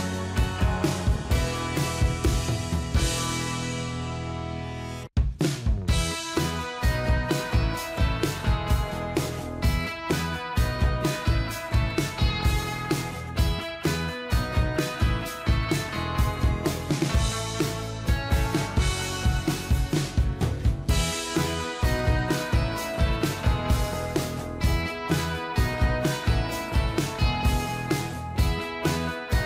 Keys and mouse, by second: 8.0 0, 9.4 double click, 10.4 0, 11.4 Return, 18.6 click, 19.9 ctrl+t, 20.7 alt+click.